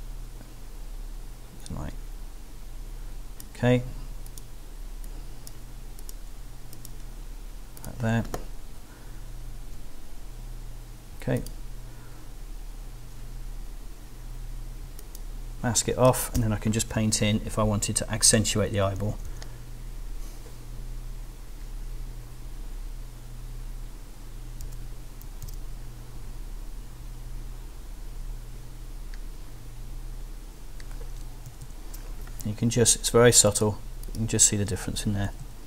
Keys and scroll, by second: 16.3 alt+b, 16.8 [, 19.0 [, 24.6 b, 25.2 super+b, 25.4 super+d, 31.5 super+-, 35.2 super+-.